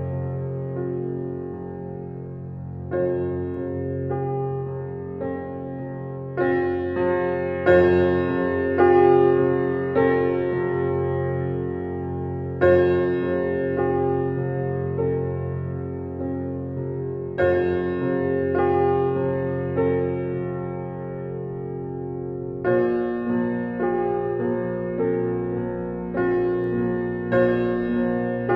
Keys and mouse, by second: 4.0 click, 6.0 click, 7.3-9.5 drag, 10.1 click, 12.2-13.9 drag, 14.5 click, 17.4 click, 19.0 ctrl+z, 21.0 Delete, 21.5-27.8 drag.